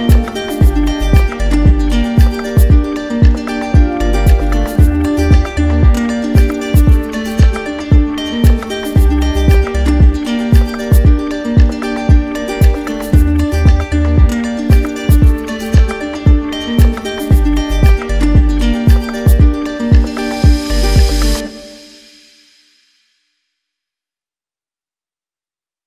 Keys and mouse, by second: 0.1 alt+right click, 0.9 right click, 1.9 right click, 2.6 right click, 3.5 right click, 4.2 right click, 4.6 alt+right click, 6.6 right click, 7.2 z, 10.4 z, 12.3 click, 14.3 click, 15.1 click, 16.6 right click, 17.6 right click, 18.4-21.0 right drag, 21.8 ctrl+d.